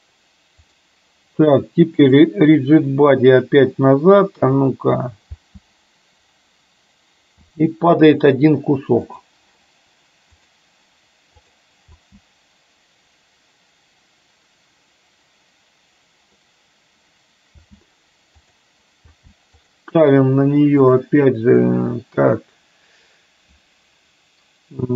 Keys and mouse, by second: 0.8 click, 5.3 space, 7.4 space, 9.2 click, 11.9 space, 17.6 space, 18.6 click, 19.1 space, 19.6 click, 21.0-24.9 drag.